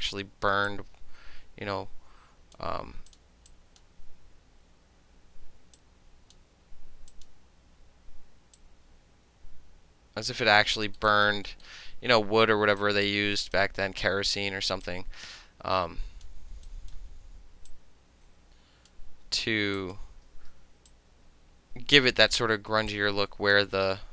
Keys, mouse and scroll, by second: 0.0 alt+middle click, 0.7-2.6 drag, 3.1 click, 3.5 drag, 5.8-6.4 drag, 7.1 click, 7.3-8.6 middle drag, 8.6-10.5 drag, 10.5 alt+middle drag, 11.0 alt+middle click, 11.1 alt+right click, 11.3 alt+middle click, 11.6-12.8 alt+middle drag, 12.8 alt+click, 13.6-14.8 alt+middle drag, 14.8-16.3 alt+drag, 16.3 alt+middle click, 16.7 alt+right click, 17.7-18.9 drag, 19.8 click, 20.4 ctrl+z, 20.9-22.0 drag, 22.1 alt+middle click, 22.9-23.5 drag.